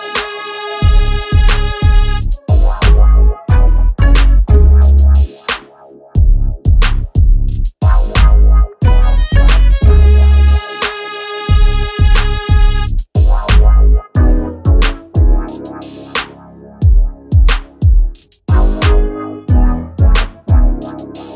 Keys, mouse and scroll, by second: 5.3-6.8 drag.